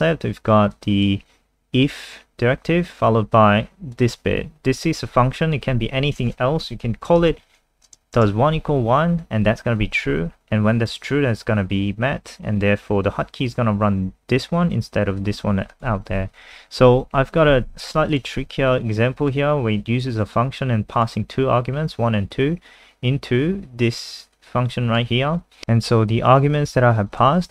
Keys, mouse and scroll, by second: 7.0-8.6 typing, 10.9 click, 16.2 ctrl+z, 16.4 ctrl+z, 16.8 ctrl+z, 17.6 ctrl+z, 18.1 click, 18.4 ctrl+s, 19.3 click, 22.6-23.6 scroll down 1, 24.4 click, 25.6 ctrl+alt+r, 26.5 click.